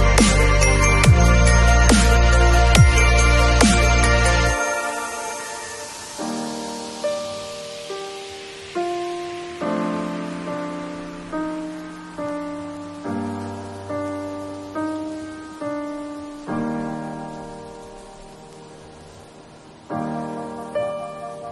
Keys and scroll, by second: 8.2 shift+v.